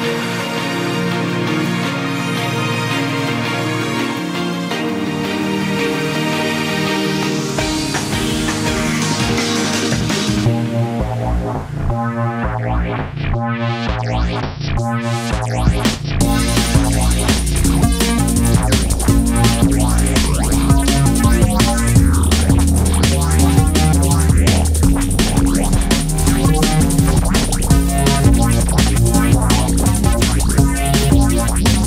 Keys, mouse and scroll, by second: 0.1 click, 3.5 KP_1, 5.8 r, 7.7 Tab, 8.1-9.3 scroll down 2, 9.3-11.7 drag, 11.7-12.9 scroll up 1, 12.9 Tab, 14.3 click, 14.7-15.2 scroll up 2, 16.1 s, 18.2 click, 19.3 click, 20.4-21.2 scroll down 1, 21.2-22.3 ctrl+KP_Add, 24.1-24.8 scroll up 1, 24.8 click, 26.6-27.1 scroll down 1, 27.1 click, 28.2 click, 29.1 KP_3, 30.4 g.